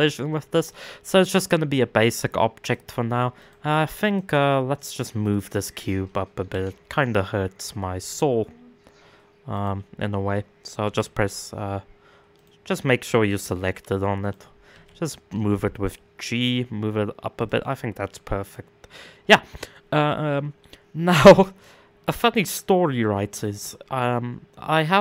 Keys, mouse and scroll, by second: 2.2 click, 4.9 click, 6.3 z, 7.6 z, 11.9 click, 12.9 click, 13.8 click, 14.3 g, 18.0 click, 18.6-20.4 middle drag, 20.4-20.7 scroll up 3, 20.7-25.0 middle drag.